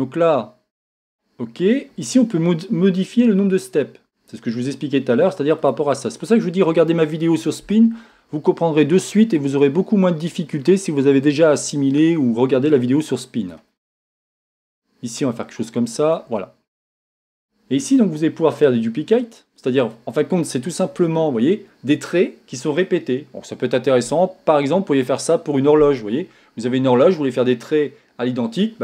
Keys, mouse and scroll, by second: 1.6 click, 9.5-13.6 drag, 14.5-16.2 drag, 19.1-28.8 drag.